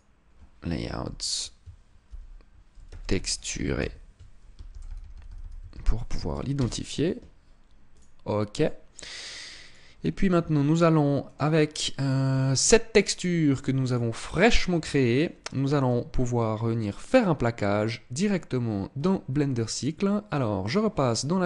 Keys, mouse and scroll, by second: 20.5 click.